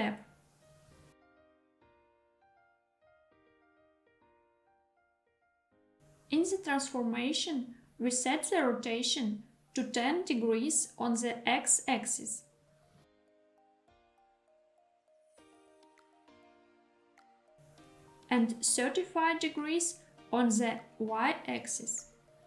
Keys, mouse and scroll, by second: 0.0 click, 3.0 click, 5.0 scroll up 1, 6.0 shift+middle click, 6.1 n, 8.3 click, 13.0-17.1 drag, 18.2-21.9 drag.